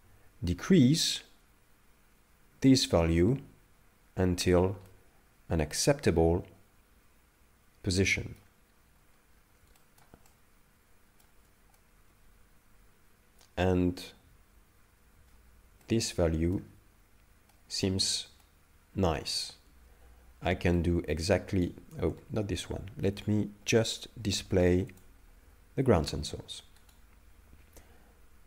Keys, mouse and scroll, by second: 1.2 shift+click, 4.9 middle click, 8.9-9.4 scroll up 1, 9.4-9.8 scroll down 1, 9.8 shift+middle click, 10.3 ctrl+middle click, 11.8 middle click, 15.8 shift+middle click, 16.9-17.5 scroll down 1, 17.5 middle click, 18.4 ctrl+middle click, 20.9 right click, 22.2 ctrl+z, 24.9 click, 26.9 right click.